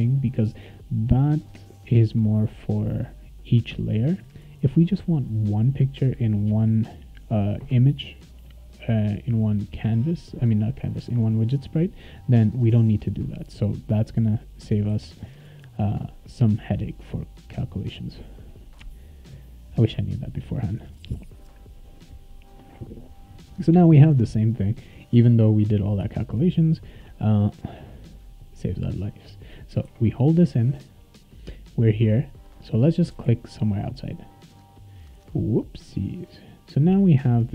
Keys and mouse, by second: 11.0 click, 11.1 click, 13.1 click, 13.2 click, 14.9 ctrl+s, 17.7 click, 22.4 click, 25.1 `, 26.0 `, 26.5 click, 29.8 e, 30.3 s, 31.3-35.0 right drag, 32.9-33.7 typing, 34.2 click, 37.4 click.